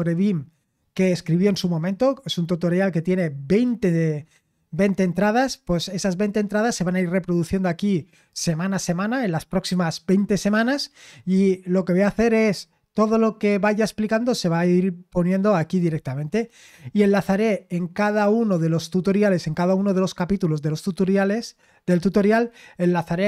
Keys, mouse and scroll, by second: 1.7-2.7 scroll down 1, 2.7-4.2 scroll up 2.